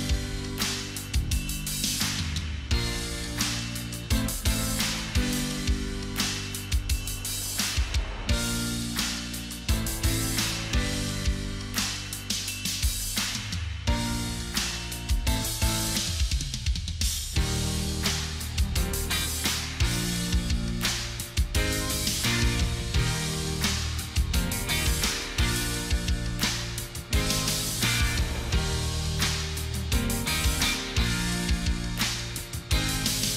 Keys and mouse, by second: 3.1 right click, 14.5 ctrl+click, 16.6 right click, 18.7 right click, 19.0 ctrl+click, 20.7 ctrl+t, 21.8 alt+click.